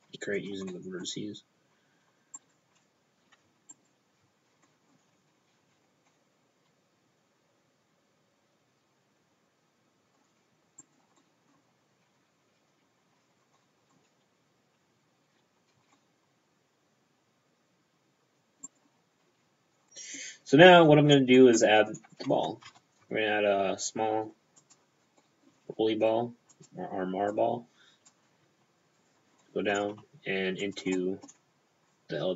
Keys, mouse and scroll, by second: 0.4 click, 0.8 middle click, 2.4 right click, 3.8 alt+right click, 4.7 middle click, 5.5 scroll down 2, 5.6 c, 6.2 middle click, 10.4-10.9 scroll down 1, 10.9 right click, 11.2 middle click, 11.7-12.7 scroll down 1, 12.7-13.4 scroll up 1, 13.5 scroll up 1, 13.6 middle click, 15.8 c, 16.0 middle click, 18.7 right click, 19.4 f, 19.9 middle click, 19.9-21.1 scroll up 3, 21.6 middle click, 22.1 shift+p, 22.6 shift+p, 22.7 shift+a, 24.7 click, 24.8 p, 25.3 middle click, 25.8 s, 26.6 click, 27.4 click, 28.3 s, 28.6 p, 29.0 click, 29.5 middle click, 30.1 s, 30.7 click, 31.0 middle click, 32.0 click.